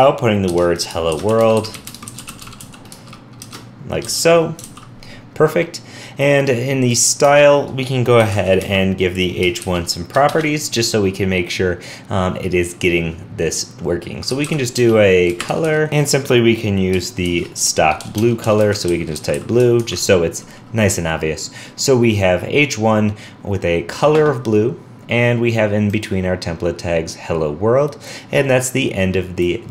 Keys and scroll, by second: 4.6 super+s, 19.8 super+s.